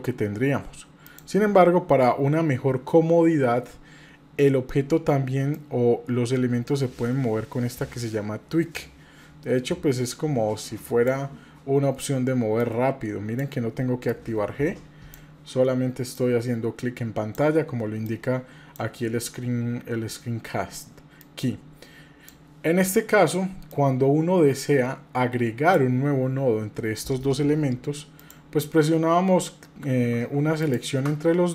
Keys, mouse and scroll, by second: 5.5-11.2 drag, 12.6 click, 14.1-15.2 drag, 16.1-17.3 drag, 18.1 click, 21.2-22.3 drag, 23.7-25.9 drag, 28.2 shift+click, 30.6 shift+click.